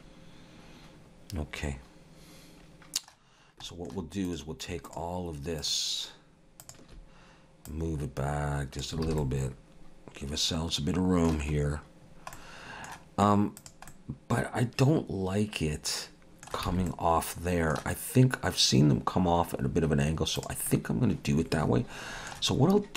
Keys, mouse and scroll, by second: 3.4 scroll down 1, 3.7 shift+middle click, 4.3 click, 4.9 shift+click, 6.5 shift+click, 6.7 click, 7.7 click, 9.1 alt+a, 9.2 middle click, 12.1 scroll down 1, 12.3 middle click, 13.6 click, 13.9 middle click, 16.8 alt+a, 16.9 middle click, 20.4 click, 20.7 middle click.